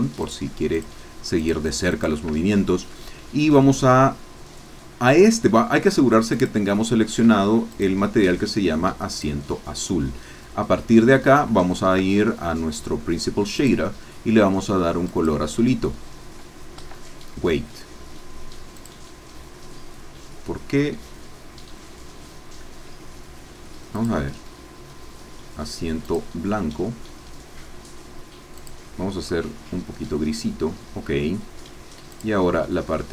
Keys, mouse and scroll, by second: 0.2 click, 0.8 shift+click, 1.4 shift+click, 2.0 shift+click, 2.7 shift+scroll up 1, 6.3 click, 7.2 Escape, 7.7 click, 9.1 click, 11.1-11.4 scroll up 2, 11.5 shift+middle click, 13.5 click, 15.1-16.7 drag, 16.7 Escape, 18.9 click, 23.9 click, 26.0 click, 28.5 click, 29.3-30.0 scroll down 2, 32.1 click.